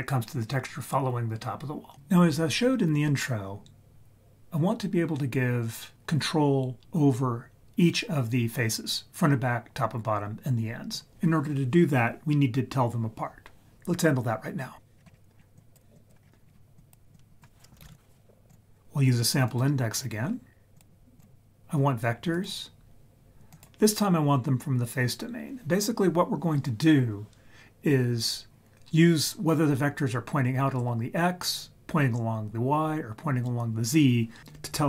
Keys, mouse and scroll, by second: 14.9-15.4 scroll up 3, 15.4 scroll down 1, 15.6 click, 15.6 scroll down 1, 15.9 click, 16.2 scroll up 1, 16.4-16.8 scroll down 1, 16.8 click, 17.1-19.5 drag, 19.9-20.7 scroll up 4, 20.7-21.2 drag, 22.3-23.6 drag.